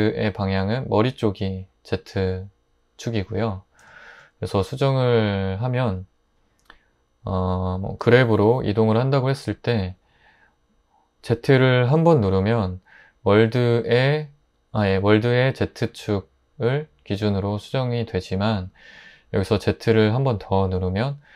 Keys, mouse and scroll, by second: 8.0 g, 11.9 z, 20.7 z.